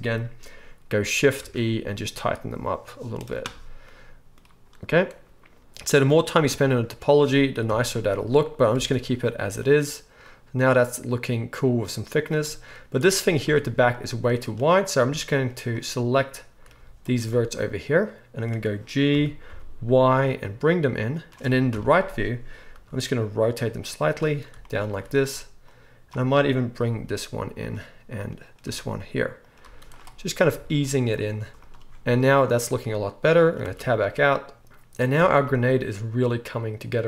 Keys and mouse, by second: 1.4 shift+e, 6.4 Tab, 7.7 KP_1, 8.8 alt+a, 9.7-11.9 shift+middle drag, 11.9-15.7 right drag, 13.4 Tab, 15.0 z, 15.7-19.8 middle drag, 16.7 z, 19.1 g, 21.2-25.7 drag, 21.7 KP_3, 22.7 r, 24.9 z, 26.9 g, 27.7 click, 28.6-31.5 typing, 29.5-30.5 drag, 30.5-34.0 right drag, 31.1 click, 31.1 middle click, 33.7 Tab, 34.0-36.3 drag, 35.2 alt+a, 36.3-37.0 right drag.